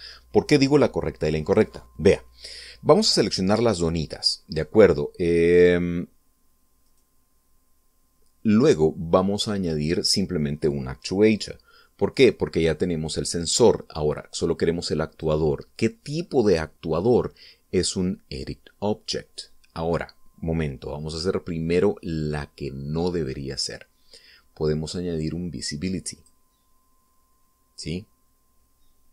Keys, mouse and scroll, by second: 7.7 right click, 15.9 click, 27.0 click.